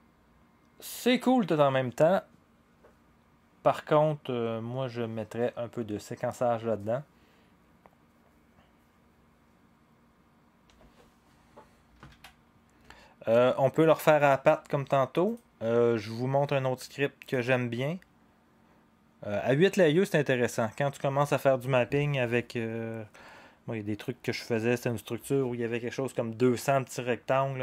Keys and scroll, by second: 10.6 0, 12.1 ctrl+a, 14.3 ctrl+a.